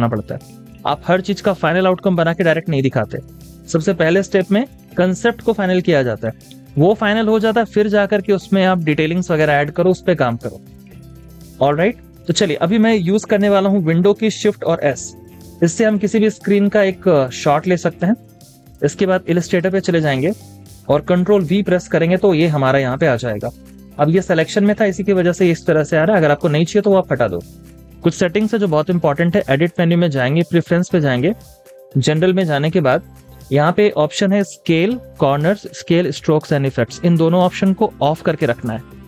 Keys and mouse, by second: 15.5 typing, 18.0 typing, 21.1 ctrl+v.